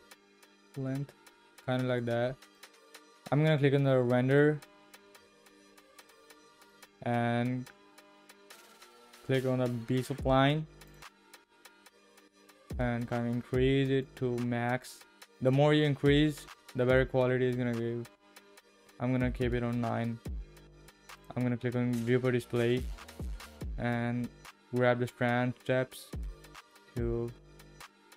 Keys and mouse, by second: 2.5 click, 10.9 click, 13.2-14.2 drag, 21.2 click, 26.7-28.1 drag.